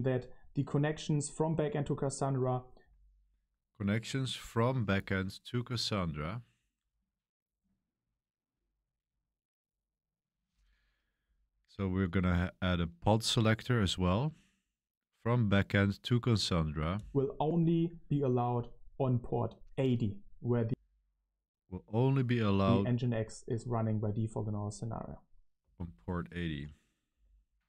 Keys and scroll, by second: 2.7 space, 16.9 space, 20.4 space, 22.5 k, 25.5 space, 27.1 Page_Up.